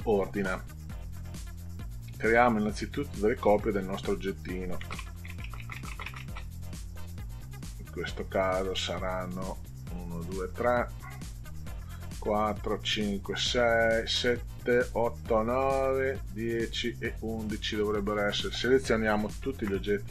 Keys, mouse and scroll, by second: 2.5 click, 3.3 click, 4.4-6.4 drag, 5.3 space, 8.1 click, 9.5 click, 10.5 click, 11.6 click, 15.7 click, 19.5 ctrl+a.